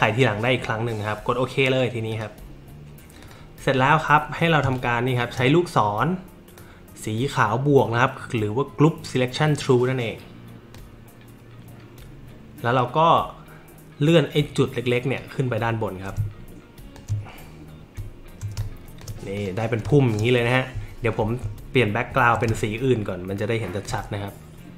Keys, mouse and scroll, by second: 2.1 click, 3.2 click, 4.6 space, 6.6-10.7 drag, 15.2-16.9 drag, 18.2 alt+middle click, 18.2 alt+scroll up 2, 18.6 click, 18.6 space, 19.4 click, 19.8 space, 19.9 click, 20.9-21.2 alt+scroll up 1, 22.1-22.4 alt+scroll down 1, 22.5 space, 22.6-23.8 drag.